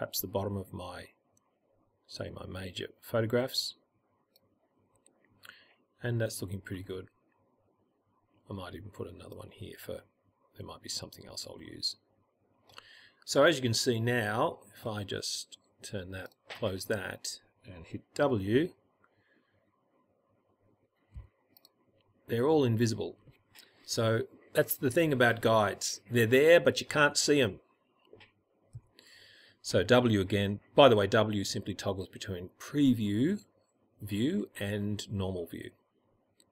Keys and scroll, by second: 18.6 w, 28.3 w.